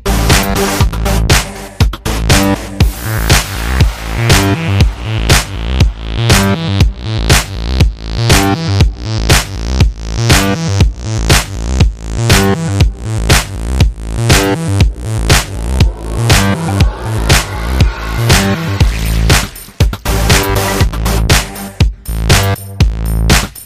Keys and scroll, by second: 0.0-0.1 typing, 0.9 super+t, 5.4 super+t, 8.4 Page_Down, 8.5 Page_Down, 9.2 space, 9.5 space.